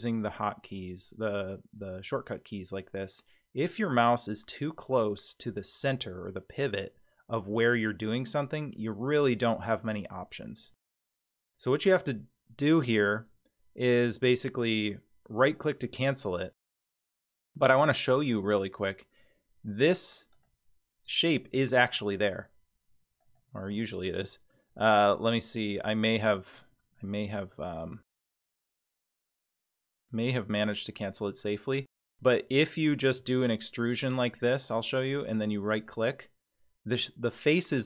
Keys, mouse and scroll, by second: 20.3 click, 22.4 g, 23.7 scroll up 5, 24.5-25.8 middle drag, 26.6 middle click, 30.8-31.3 scroll down 1, 31.3 middle click, 32.1-33.2 scroll down 2, 33.2 e.